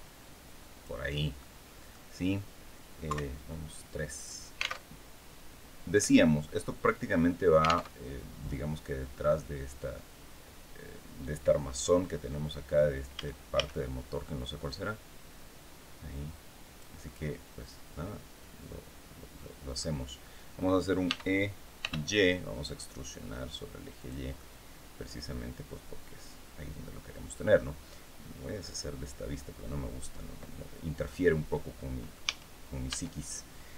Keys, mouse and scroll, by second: 0.8 scroll down 1, 1.1 middle click, 2.8 KP_3, 3.6 scroll up 2, 4.5 alt+Tab, 7.6 alt+Tab, 12.8 a, 14.3-16.7 drag, 16.7-18.0 middle drag, 18.0 scroll up 2, 20.7 e, 21.5 y, 23.7 click, 24.0-27.4 middle drag, 28.3 click, 29.2-32.0 middle drag, 31.9 a, 32.6 Tab.